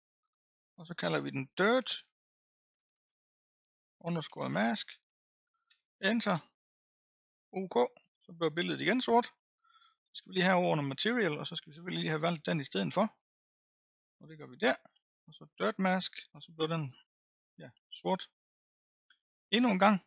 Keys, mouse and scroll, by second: 2.8 BackSpace, 3.0 BackSpace, 10.6 click, 14.5-16.5 drag, 16.5-16.9 scroll up 5, 17.3-18.5 middle drag, 18.5-19.0 scroll up 1.